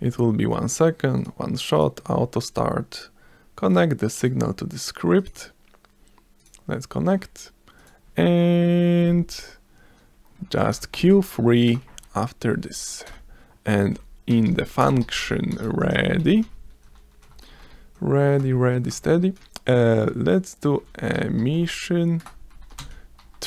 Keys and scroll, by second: 3.7 s, 7.8 s, 10.6-12.4 typing, 11.7 Return, 13.1 Return, 13.7-18.2 typing, 18.4 Return, 20.1-23.4 typing, 22.2 Return.